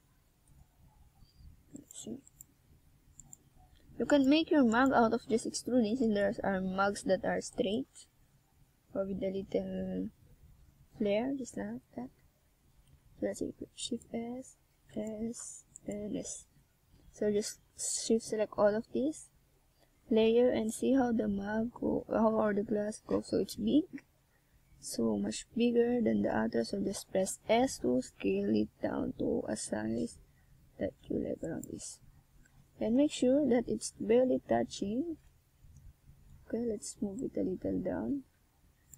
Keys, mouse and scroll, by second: 0.6 middle click, 10.5 ctrl+r, 11.2 click, 12.2 ctrl+r, 13.2 click, 13.8 right click, 14.5 shift+right click, 15.4 right click, 17.1 KP_1, 20.0 click, 21.4 right click, 22.4 click, 23.4 middle click, 24.3 right click, 26.2 KP_1, 27.5 click, 29.8 click, 31.9 middle click, 33.1 right click, 34.1 shift+right click, 34.4 right click, 34.7 right click, 35.0 right click, 35.4 shift+right click, 35.8 shift+right click, 36.1 shift+right click, 36.3 shift+right click, 36.7 shift+right click, 38.1 KP_1.